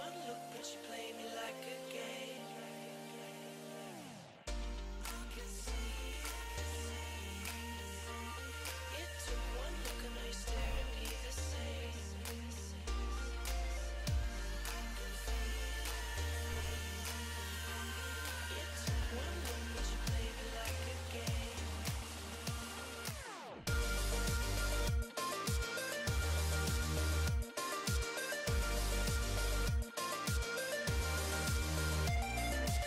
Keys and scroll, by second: 14.3 s, 14.7 s.